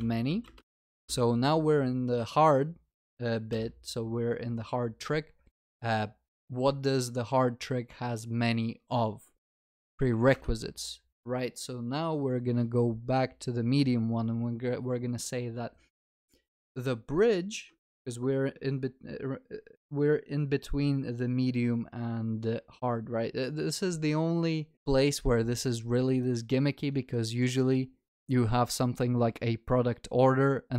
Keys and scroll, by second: 10.4 Return.